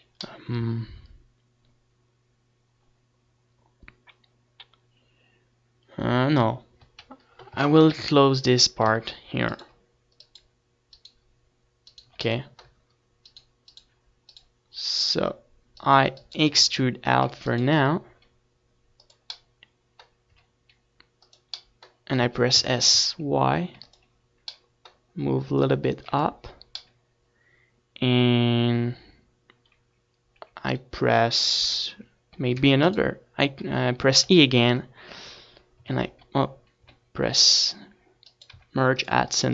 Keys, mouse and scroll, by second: 5.5-7.6 middle drag, 12.7 middle click, 13.7 Tab, 14.6 a, 14.9 a, 15.3-24.3 right drag, 17.8-22.2 drag, 17.8-22.2 middle drag, 22.4 e, 23.0 s, 24.4 click, 24.4-25.9 right drag, 25.4 s, 26.2-27.8 drag, 26.9 s, 28.5-31.0 drag, 31.0 right click, 33.0 middle click, 36.7 e, 37.0-38.3 right drag, 38.0 d, 39.1 middle click.